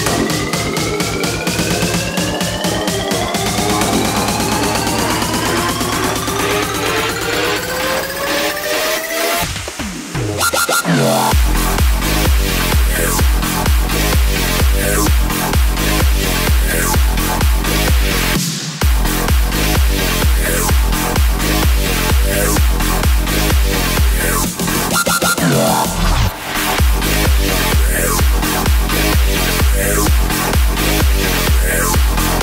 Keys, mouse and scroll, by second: 0.9 s, 10.7-18.1 drag, 19.9-27.1 drag, 27.1 s, 30.6 g.